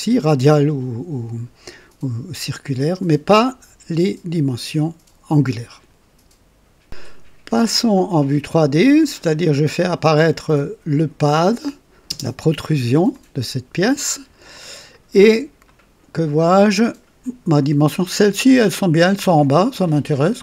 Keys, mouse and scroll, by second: 6.8 click, 9.3 click, 12.0 space, 13.0-14.4 drag, 14.6 click, 15.1 scroll up 1, 15.6 right click, 16.3 click, 18.8-20.4 drag.